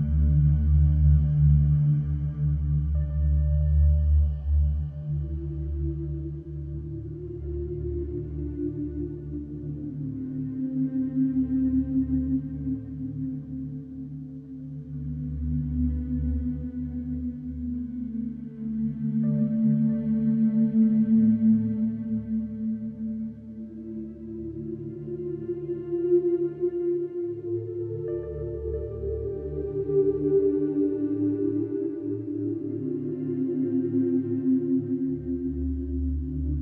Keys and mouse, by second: 6.7 shift+d, 8.3-14.2 drag, 15.2 click, 16.7 click, 20.8 ctrl+s, 22.6 click, 24.5 1, 25.6-27.9 ctrl+alt+drag, 28.6 alt+shift+click, 29.1 ctrl+alt+click, 29.9 alt+shift+click, 30.5-32.2 ctrl+alt+drag, 34.0 click, 34.8 click, 36.1 a.